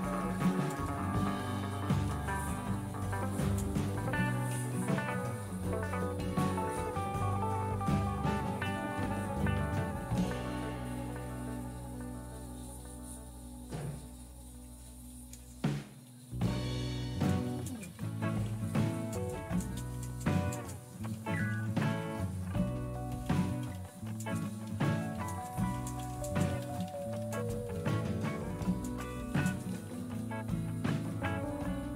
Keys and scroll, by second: 0.0-3.8 typing, 7.6-8.4 BackSpace, 15.1 typing, 16.4-30.8 typing.